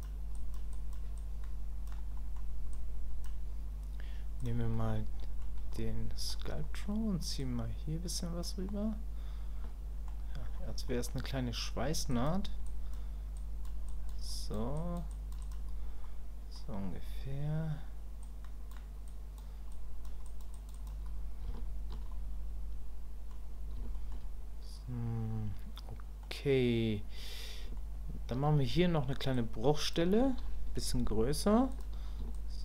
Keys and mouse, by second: 0.3 click, 0.7 click, 1.2 click, 2.1 middle click, 2.7 click, 4.4 click, 4.8 middle click, 5.8 middle click, 6.6 middle click, 7.4-8.4 drag, 8.7-10.1 middle drag, 10.9 middle click, 12.1 click, 12.6 click, 13.4 click, 13.9 click, 14.3 click, 14.8 click, 15.1 click, 15.4 click, 16.0 middle click, 18.2 click, 19.1 click, 19.7 click, 20.3 click, 20.5 click, 20.7 click, 21.5 shift+click, 22.1-23.3 middle drag, 23.9 shift+click, 25.8 middle click, 27.8 shift+click, 29.3 ctrl+click, 32.4-32.6 ctrl+drag.